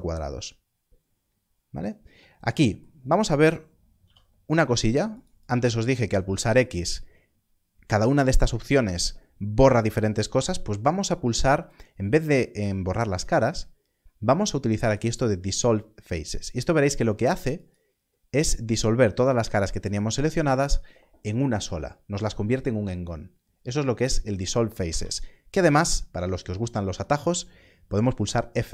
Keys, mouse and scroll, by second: 0.4 scroll up 1, 3.9 3, 4.8 shift+click, 6.3 x, 17.5 x, 24.9 ctrl+z.